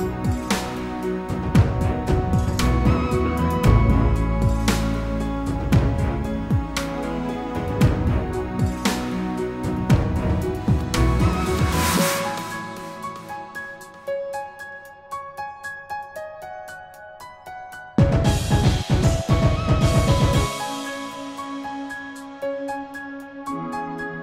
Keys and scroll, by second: 22.2 ctrl+g.